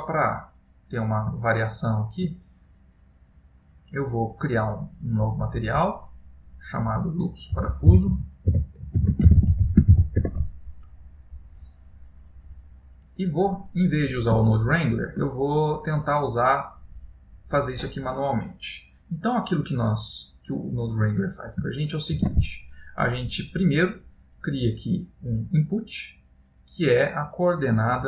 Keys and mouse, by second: 0.1 middle click, 1.5 shift+middle click, 3.0 click, 5.5 click, 7.2 click, 12.1 middle click, 14.6 ctrl+middle click, 15.7 middle click, 18.0 middle click, 20.3 middle click, 22.3 shift+a.